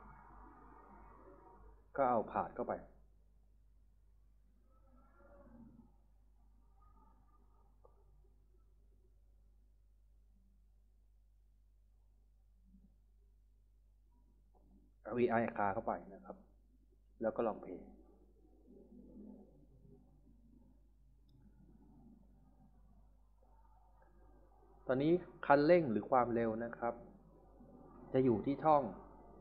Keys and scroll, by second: 19.4-22.9 typing.